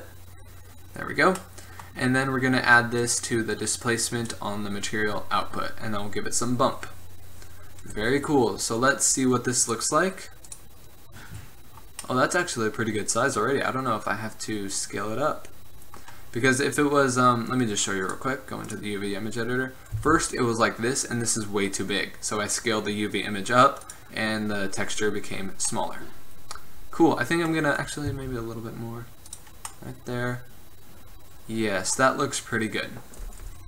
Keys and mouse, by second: 3.3-3.7 middle drag, 3.7-8.2 drag, 8.6 middle click, 8.8-10.6 middle drag, 11.4 middle click, 11.9-13.9 middle drag, 18.2-22.2 drag, 20.1 s, 24.4 middle click, 25.2 middle click, 25.8 middle click, 26.0 middle click, 26.9 middle click, 27.1 middle click, 27.3 middle click, 28.2 s, 31.0 middle click, 32.3-33.6 drag.